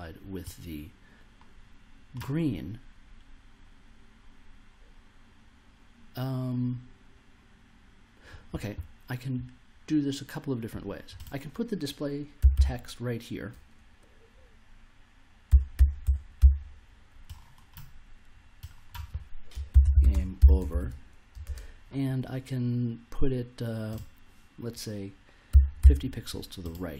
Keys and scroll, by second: 12.1-13.0 typing, 15.2-16.9 typing, 19.4-21.4 typing, 25.5 5, 25.8 0.